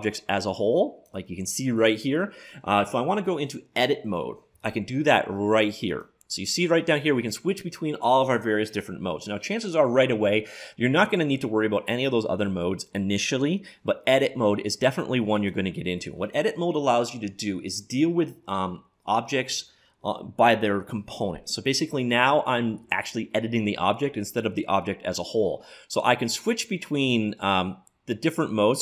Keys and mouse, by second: 0.0-1.8 drag, 5.9-7.7 drag.